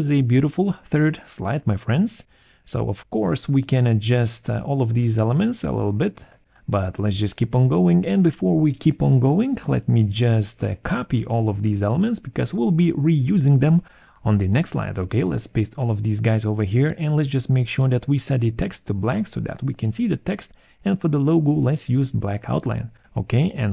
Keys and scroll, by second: 7.1 Right, 8.1 Left, 13.1 ctrl+c, 14.0 Return, 14.9 ctrl+v, 20.0 alt+v, 20.1 alt+3.